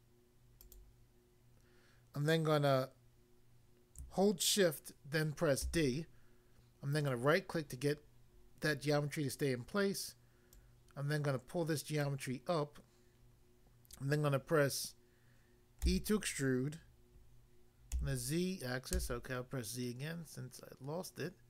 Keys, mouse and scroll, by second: 0.6 click, 0.8 click, 5.6 d, 7.0 right click, 10.6 click, 12.0 click, 15.9 e, 17.9 z, 19.0 z.